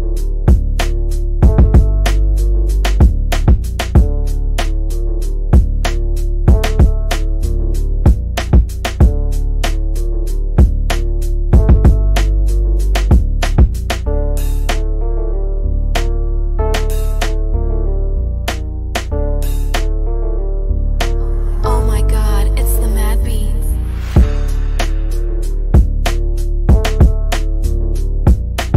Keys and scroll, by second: 8.1 c, 9.1 shift+F2, 17.0 F3, 17.4 Escape, 19.2 Delete.